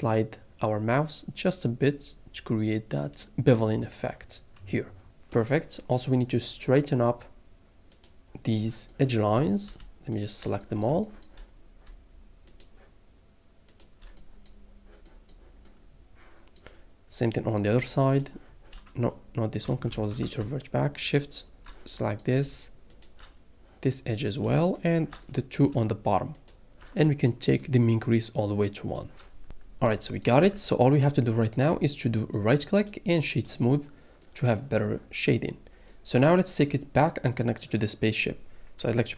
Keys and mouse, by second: 8.0 click, 12.5 shift+click, 18.1 shift+click, 19.9 ctrl+z, 22.9 shift+click, 24.7 shift+click, 27.6-28.9 drag, 30.4 Tab.